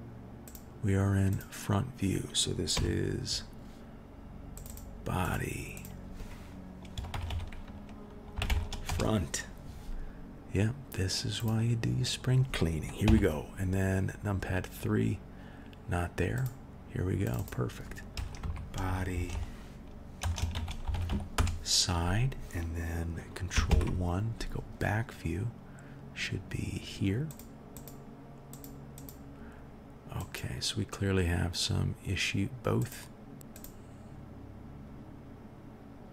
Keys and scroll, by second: 2.7 KP_1, 13.0 KP_3, 19.1 BackSpace, 23.7 ctrl+KP_1.